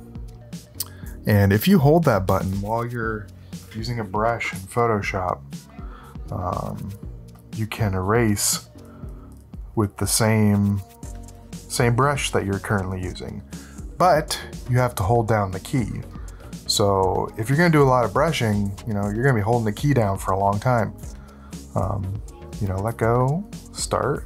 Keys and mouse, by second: 1.6 `, 4.5 `.